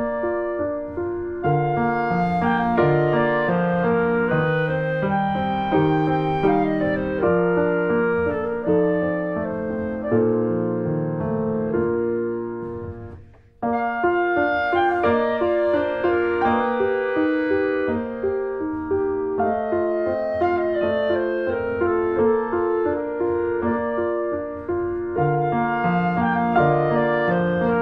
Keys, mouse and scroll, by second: 0.0 scroll down 1, 0.1 Tab, 0.2 middle click, 0.5 ctrl+s, 0.6 click, 0.7 middle click, 1.0 ctrl+s, 1.1 shift+middle click, 1.2 scroll up 1, 1.3-2.8 middle drag, 2.8 scroll up 1, 3.0 click, 3.1 shift+middle click, 3.4 ctrl+s, 3.9 click, 4.0 middle click, 4.3 scroll up 1, 4.6 middle click, 4.9 click, 5.1 middle click, 6.0 scroll down 2, 6.1 middle click, 6.4 middle click, 6.8 click, 7.5 alt+middle click, 7.7 scroll up 3, 8.0 scroll down 2, 8.1 shift+middle click, 8.6 click, 9.2 alt+middle click, 9.5 click, 9.6 Tab, 9.7 scroll down 1, 9.8 middle click, 10.8 click, 11.0 click, 11.1 s, 11.8-12.2 scroll down 2, 12.2 shift+middle click, 12.5 click, 12.6 s, 13.3 Tab, 13.7 click, 14.7 ctrl+z, 14.9 middle click, 15.4 alt+scroll up 2, 15.7 Tab, 15.9 click, 16.0 s, 16.9 click, 17.5 ctrl+z, 17.9 click, 18.9 alt+middle click, 19.3 click, 19.8 alt+middle click, 20.2 click, 20.4 s, 21.0 click, 21.2 click, 22.1 alt+middle click, 22.6 click, 22.8 click, 22.9 Tab, 23.0 middle click, 23.9 s, 25.8 shift+middle click, 26.1 r, 26.8 click, 27.0 e.